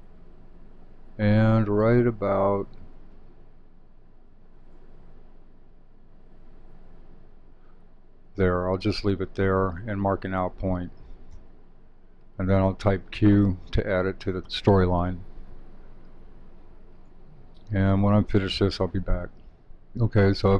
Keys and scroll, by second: 18.7 shift+super+3.